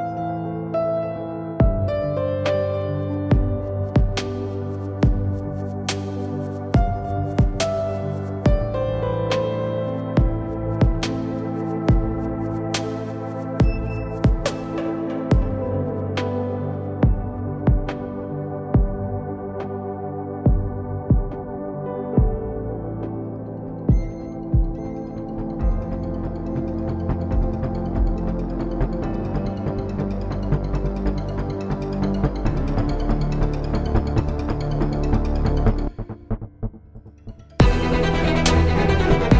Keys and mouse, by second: 0.6 ctrl+b, 3.9 Tab, 8.7 KP_7, 9.2 Tab, 9.5 z, 10.2 ctrl+Tab, 13.2-15.8 drag, 13.8 c, 15.9-17.2 drag, 16.3 shift+d, 18.0 s, 19.6 click, 20.4 s, 22.9 s, 24.3 z, 26.5 click, 29.3 Tab, 29.7 Tab, 30.3 p, 31.0 Tab, 33.2 t, 34.7 t, 35.7 z, 36.0 z, 38.3-39.3 drag, 39.3 right click.